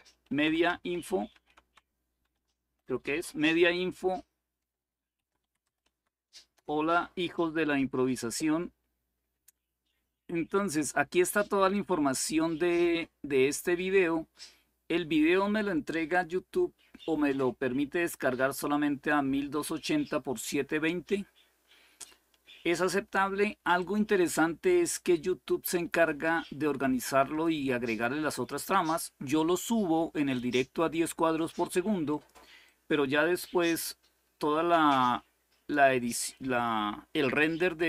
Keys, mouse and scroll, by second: 0.0-2.6 typing, 4.7-6.4 typing, 5.6 Tab, 9.8-12.6 scroll up 1, 12.6-13.9 scroll up 1, 13.9-15.8 scroll up 1, 15.8-18.4 drag, 22.0-23.5 scroll down 2, 23.5-27.2 drag, 31.8 click.